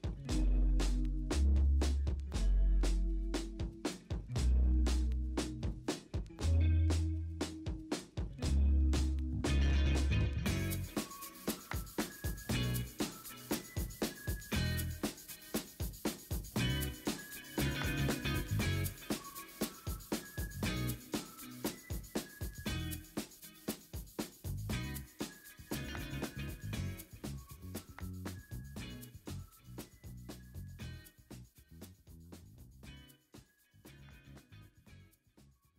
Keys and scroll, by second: 1.0 ctrl+j, 2.1 ctrl+t, 2.1 v, 2.4 Escape, 5.4 v, 6.9 m, 7.3 b, 7.6 b, 7.7 b, 8.2 ctrl+z, 8.7 ctrl+z, 9.1 1, 9.8 ctrl+z, 9.9 2, 10.5 1, 11.2 ctrl+t, 12.4-13.5 typing, 13.0 ctrl+z, 18.6 w, 18.7 Escape, 19.0 Return, 19.2 w, 19.8 Return, 20.2 ctrl+d, 21.3 ctrl+l, 24.5 0, 26.5 ctrl+d, 26.7 e, 27.0 ctrl+z, 27.3 b, 28.0 0, 29.7 v, 30.3 Escape, 30.5 ctrl+x, 30.8 ctrl+z, 31.1 ctrl+shift+i, 31.3 ctrl+x, 31.6 v, 32.0 ctrl+w, 32.6 ctrl+w, 33.3 ctrl+v, 34.4 Return, 35.2 v, 35.6 ctrl+t.